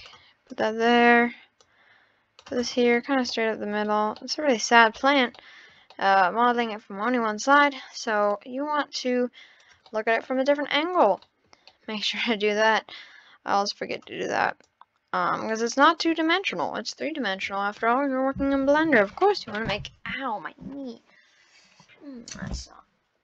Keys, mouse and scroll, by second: 0.0 click, 0.5 click, 1.6 click, 2.6 click, 2.8-3.3 scroll down 9, 3.3-3.7 middle drag, 3.7-5.0 scroll up 5, 4.2 middle click, 5.0 click, 5.3-7.5 shift+middle drag, 7.5 scroll down 2, 8.2 click, 9.9-10.9 middle drag, 10.9 click, 11.2 scroll up 1, 11.3-12.5 middle drag, 12.5 click, 14.7 click, 16.4 click.